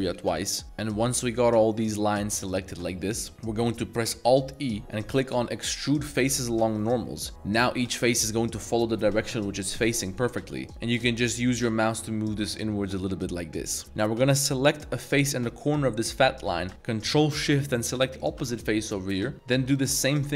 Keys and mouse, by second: 0.1-3.3 middle drag, 0.6 z, 4.2 alt+e, 13.8 a, 15.0 click, 18.1 ctrl+shift+click, 18.9 middle click, 19.6 shift+click.